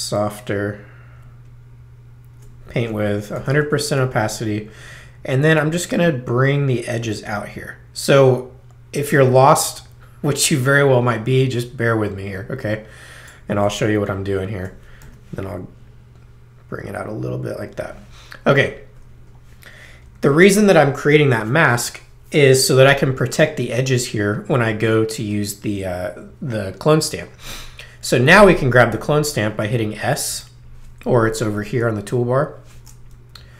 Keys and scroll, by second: 2.8 ctrl+alt+i, 3.3 0, 15.0 ctrl+alt+5, 15.7 5, 20.1 super+-, 27.2 space, 30.3 s.